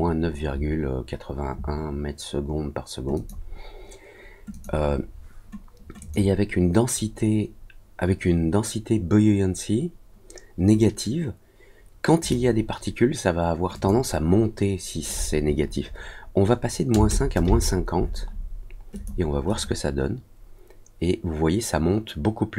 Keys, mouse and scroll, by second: 3.1 click, 4.5 click, 5.9 click, 12.2 click, 13.7 click, 18.9 click, 19.4 click.